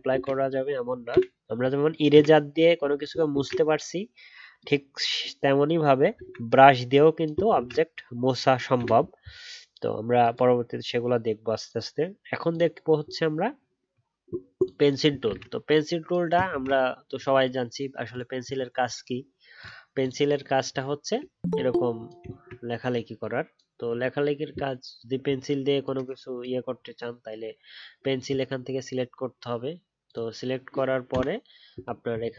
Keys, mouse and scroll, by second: 0.0 ctrl+z, 7.5 ctrl+z, 15.2 ctrl+z, 21.2-25.4 alt+scroll up 1.